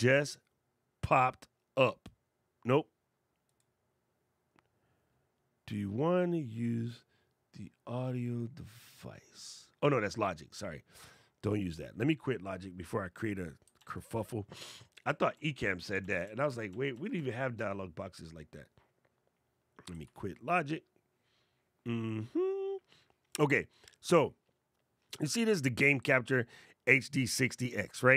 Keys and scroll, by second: 13.5 super+Tab, 19.8 super+q.